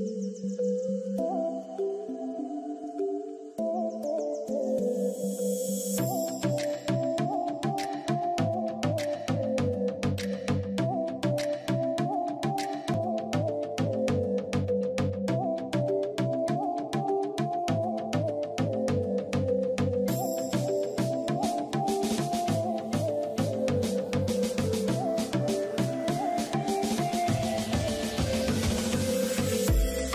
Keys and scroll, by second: 8.2 ctrl+i, 10.1 b, 12.0 x.